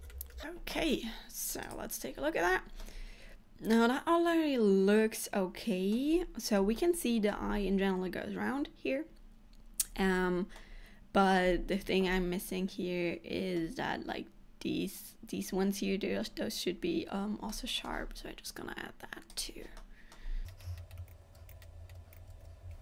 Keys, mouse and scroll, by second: 0.1 shift+middle click, 1.9 click, 2.5 scroll down 2, 2.9 middle click, 6.3-6.8 scroll up 1, 6.8 middle click, 7.6-8.0 scroll down 3, 10.6 middle click, 11.6-12.2 scroll up 1, 12.2 middle click, 12.2 scroll up 2, 17.6 middle click, 19.4 click, 19.9 middle click, 20.4-20.8 scroll up 4, 20.5 shift+middle click, 20.8 middle click, 21.1 click, 21.5 shift+click, 21.7 shift+middle click, 22.2 shift+click, 22.4 shift+e.